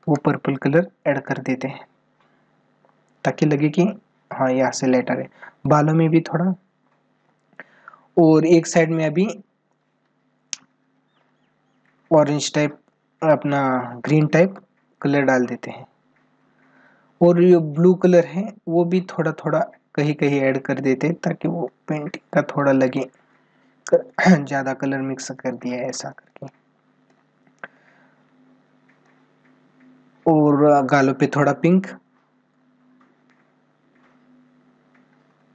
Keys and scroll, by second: 13.8 ctrl+alt+z.